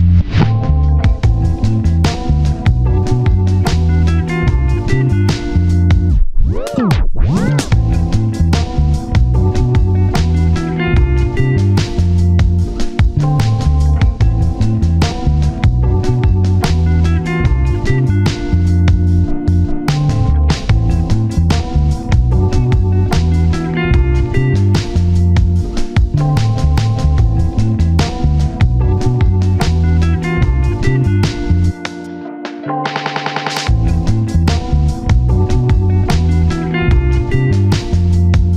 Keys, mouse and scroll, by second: 0.2 alt+z, 1.0 typing, 1.6 right click, 1.8 scroll down 1, 1.9 scroll up 1, 2.2 s, 2.7 double click, 4.1 scroll down 1, 4.3 shift+middle click, 4.4-5.1 scroll up 1, 5.1 double click, 5.4 s, 6.0 x, 6.1 scroll down 1, 6.3 x, 6.4 shift+middle click, 6.5-6.9 scroll up 1, 7.7 x, 7.7 scroll down 1, 8.1 s, 8.2 shift+middle click, 8.3-8.8 shift+scroll down 1, 8.8 double click, 9.1 alt+z, 9.2 scroll down 1, 9.3 shift+middle click, 11.8 shift+middle click, 11.9-12.6 scroll up 1, 12.8 shift+middle click, 14.5 scroll down 1, 14.7 typing, 15.3 double click, 15.5-16.2 scroll down 1, 16.3-17.2 scroll up 1, 17.2 right click, 18.2 alt+click, 18.7-19.1 typing, 19.7 alt+click, 20.6 g, 21.2 g, 21.4 double click, 21.5-22.0 scroll down 1, 22.0 double click, 22.2-22.5 scroll down 1, 22.5-23.0 typing, 23.1 scroll up 1, 23.3-23.7 scroll, 25.2 scroll down 1, 25.4 typing, 25.7-26.2 scroll up 1, 27.3 alt+z, 27.8 alt+z, 28.8 scroll up 1, 29.8 ctrl+z, 30.0 ctrl+z, 31.3 double click, 31.8-32.2 scroll down 1, 32.4 shift+middle click, 32.5-33.3 scroll down 1, 33.3-35.2 typing, 35.5 double click, 36.5 alt+click, 36.9-37.4 typing.